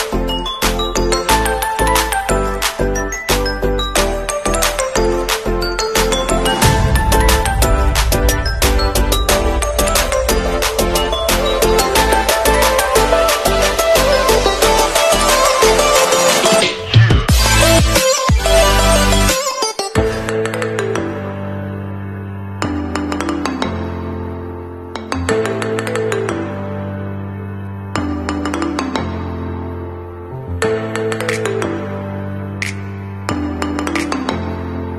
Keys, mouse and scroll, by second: 4.3 click, 10.5 ctrl+a, 11.3 a, 13.1 click, 23.4 ctrl+a, 24.0 alt+Up, 24.4 alt+Up, 27.0 alt+Right, 27.9 alt+Up, 28.1 alt+Up, 28.4 alt+Up, 28.6 alt+Up, 28.9 alt+Right, 33.9 click.